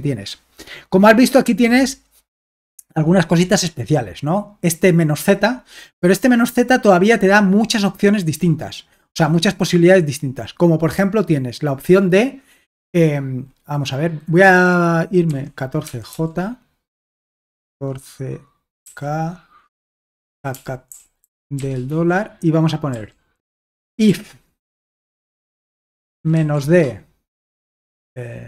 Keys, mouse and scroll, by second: 3.1-4.5 scroll up 1, 15.3-18.8 typing, 20.1-26.8 typing.